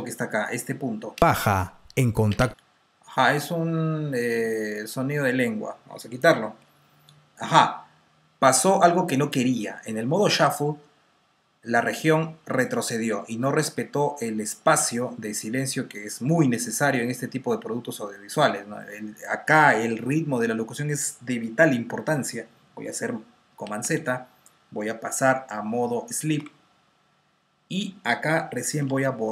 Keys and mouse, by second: 1.0 space, 4.7 click, 4.7 space, 7.0 Delete, 23.4 super+z, 27.3 F2, 28.7 Delete.